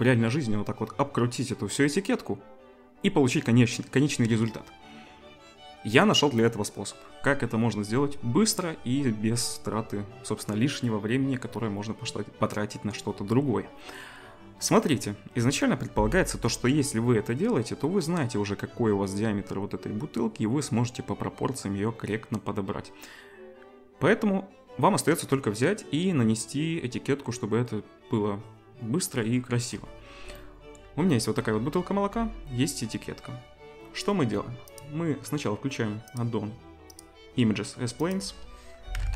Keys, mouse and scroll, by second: 31.9 z, 34.7-39.1 drag, 34.9-39.1 middle drag.